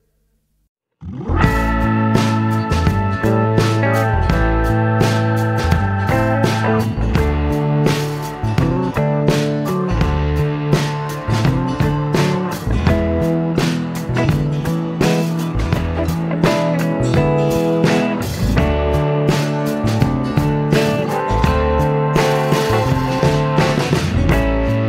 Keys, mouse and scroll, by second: 0.1 click, 1.1 click, 2.8 click, 8.3 click, 9.7 click, 11.3 click, 12.7 click, 14.0 click, 14.2 space, 16.5 click, 17.7-18.8 drag, 18.7 space, 21.1 click, 23.1 click, 24.6-24.8 drag.